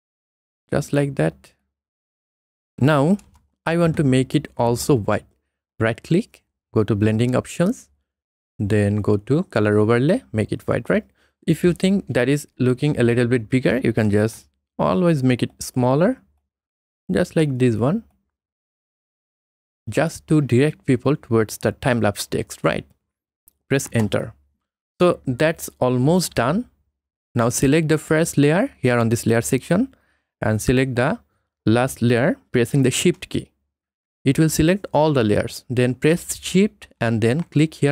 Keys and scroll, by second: 3.3 Return, 23.9 Return.